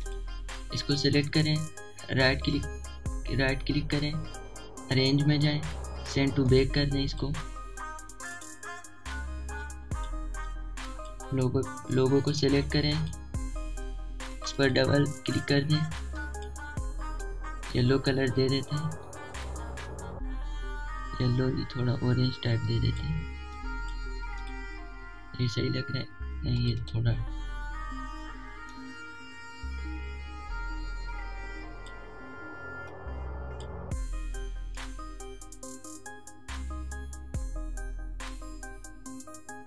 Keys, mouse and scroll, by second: 5.4-23.4 drag, 5.4 typing, 25.5-34.5 drag, 25.5 typing, 35.6-39.6 drag, 38.7-39.4 typing.